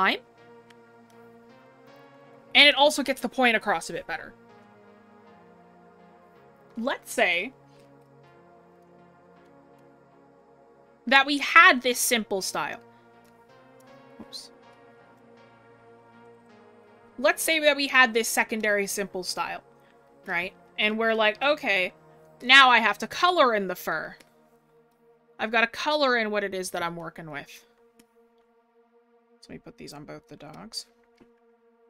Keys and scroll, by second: 14.1 scroll, 14.2 scroll up 1, 18.2 scroll down 1, 21.9 scroll up 1, 22.3 scroll, 31.5 scroll up 1.